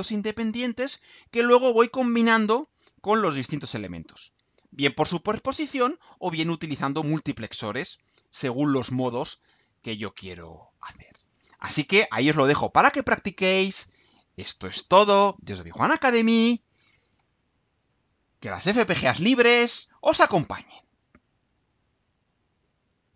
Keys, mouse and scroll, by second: 22.3 click, 23.1 click.